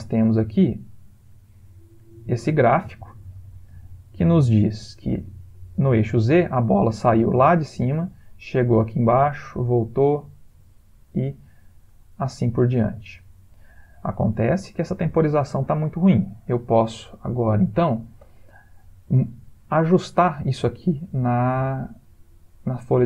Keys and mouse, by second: 2.4 ctrl+middle click, 3.0 middle click, 3.2 middle click, 3.9 ctrl+middle click, 5.6 middle click, 7.7 click, 21.5 click.